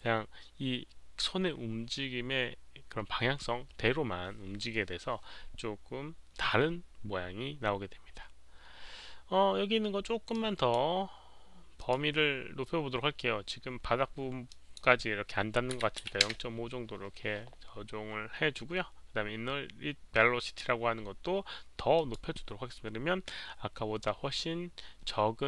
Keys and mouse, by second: 10.4 click, 11.9 click, 14.4 click, 15.7 KP_Decimal, 16.0 click, 16.0 KP_Decimal, 16.0 KP_5, 16.2 Return, 20.1 click, 21.9 click, 22.1 Return, 22.1 KP_5, 22.1 KP_Decimal, 25.2 KP_Decimal.